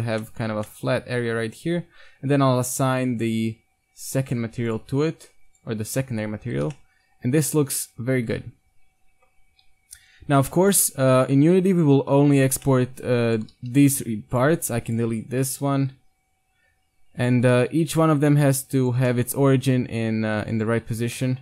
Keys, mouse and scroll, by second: 0.1 Tab, 0.5 Tab, 4.1-6.5 drag, 6.0 Tab, 6.5 Tab, 6.6 a, 6.7-7.7 middle drag, 8.0 middle drag, 8.3 middle drag, 9.6 KP_1, 11.7-12.4 right drag, 12.4-13.5 drag, 12.7-13.5 right drag, 13.5 g, 13.7 right click, 13.8-14.3 right drag, 14.8 x, 15.6 g, 17.5 g, 19.1-19.4 middle drag, 19.7 g, 20.8 Tab.